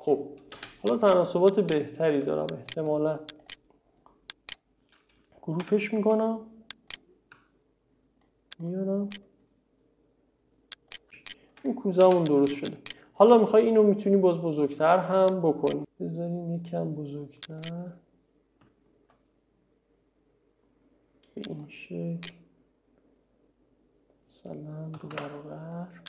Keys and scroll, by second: 0.6 space, 5.7 m, 12.1 space, 25.0 2, 25.2 Return.